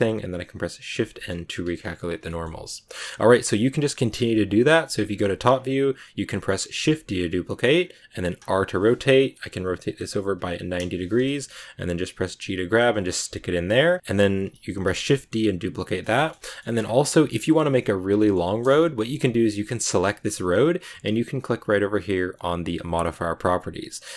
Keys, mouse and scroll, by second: 0.8 shift+n, 1.5 Tab, 1.7-2.1 scroll down 8, 2.0 a, 2.2-3.4 middle drag, 2.7 z, 3.4 right click, 4.1 KP_7, 4.9 scroll down 2, 5.2 shift+middle click, 5.3 scroll up 2, 6.2 right click, 6.6 shift+d, 8.3 r, 11.4 scroll down 2, 11.7 g, 12.9 scroll up 2, 13.2 a, 13.7 right click, 14.8 shift+d, 16.1 shift+middle click, 16.3 a, 16.3 middle click, 16.6 scroll up 1, 17.1 shift+middle click, 17.4 right click, 18.1 shift+middle click, 18.5 scroll up 2, 18.8 g, 22.5 click.